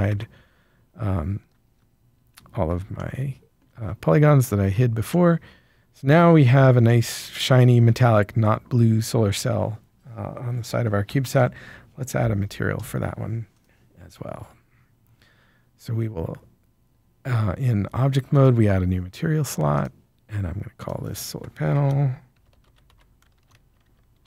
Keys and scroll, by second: 0.0 alt+a, 21.7-24.2 typing.